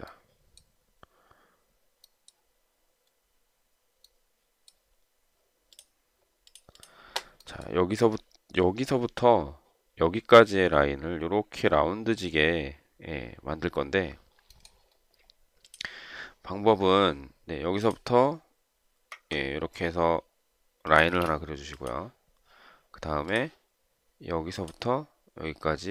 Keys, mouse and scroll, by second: 21.4 space.